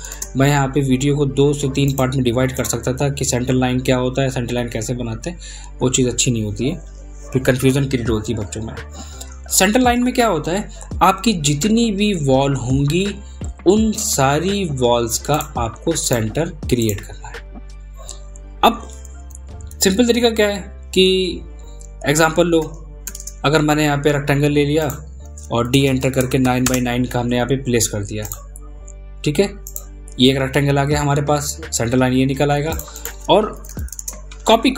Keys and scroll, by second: 17.7 ctrl+z.